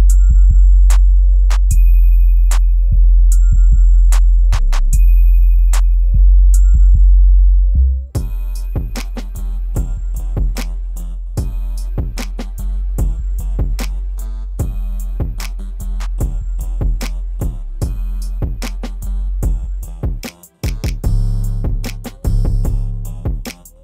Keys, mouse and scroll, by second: 0.2-1.0 scroll down 1, 1.0-2.5 scroll down 2, 1.0 click, 7.1-8.0 scroll up 1, 8.0-10.4 drag, 11.8 right click, 12.6-13.5 scroll down 1, 14.0 click, 15.5 right click, 16.3-16.8 scroll down 1, 16.8 click, 17.2 scroll up 1, 18.8 click, 20.1 right click, 20.7 scroll down 1, 23.0 scroll up 1.